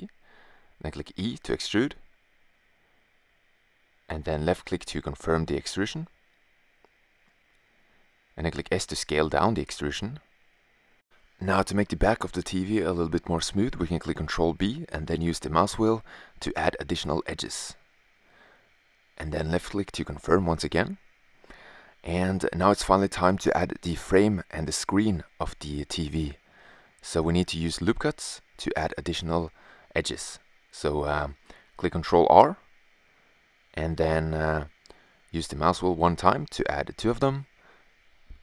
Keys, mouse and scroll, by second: 0.7 e, 7.1 s, 11.9 ctrl+b, 20.0 middle click, 22.5 middle click, 27.7-31.0 middle drag, 31.0 ctrl+r.